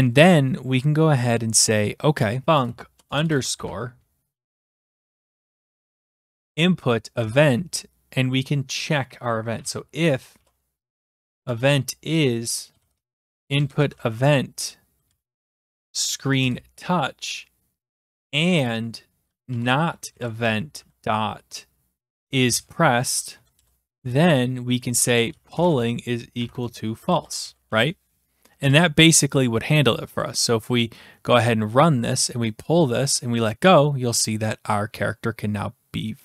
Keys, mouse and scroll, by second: 2.4-6.6 typing, 7.2 Return, 9.3-16.2 typing, 16.4 Return, 18.2-28.6 typing, 23.3 Down, 23.6 Return, 30.2-31.3 drag, 33.4-34.4 drag.